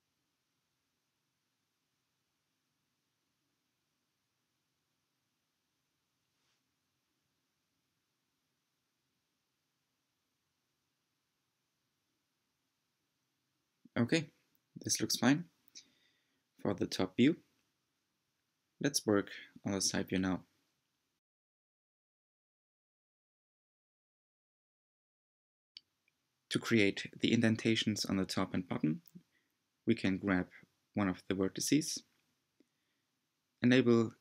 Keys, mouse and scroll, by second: 0.7 g, 2.9 click, 3.3 r, 4.5 g, 6.8 click, 7.1 g, 10.3-10.9 scroll down 2, 11.5-11.9 scroll up 2, 12.3 g, 14.6 scroll down 4, 16.5 click, 18.1 scroll up 1, 18.6-19.3 scroll up 1, 22.1-24.1 middle drag, 24.1 click, 24.9-26.2 middle drag, 26.2 alt+z, 27.6 g, 29.6-31.0 drag, 31.0 g.